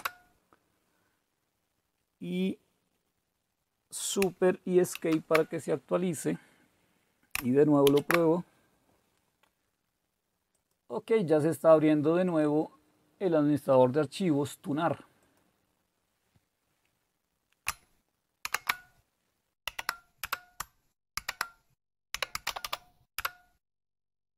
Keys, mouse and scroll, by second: 0.0-0.4 typing, 4.9 super+Escape, 7.9 alt+super+f, 10.6 click, 12.3-13.9 drag, 15.2-17.3 drag, 18.5 shift+super+q, 19.7 ctrl+o, 20.2 Return, 21.2 ctrl+x, 21.9-23.1 typing, 23.2 Return.